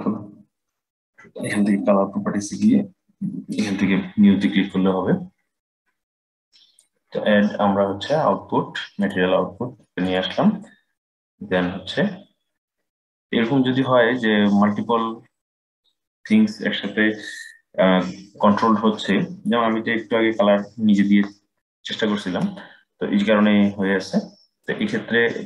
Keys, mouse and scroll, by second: 6.5-9.7 drag.